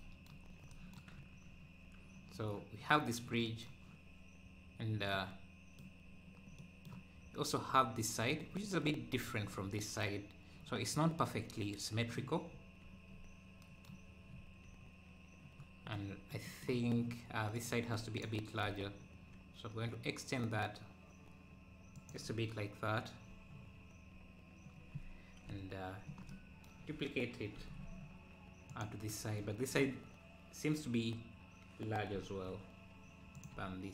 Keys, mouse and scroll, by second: 0.6 scroll down 2, 1.2 scroll down 1, 4.5-5.0 scroll up 2, 5.1 middle click, 6.1-6.5 scroll down 1, 6.6-12.3 middle drag, 12.3 scroll down 2, 13.1-13.6 scroll up 2, 16.3-17.6 middle drag, 17.6-19.0 drag, 19.0 s, 25.5 KP_7, 26.2 KP_7, 27.6 shift+d, 32.2 s, 32.6 s, 33.5 `.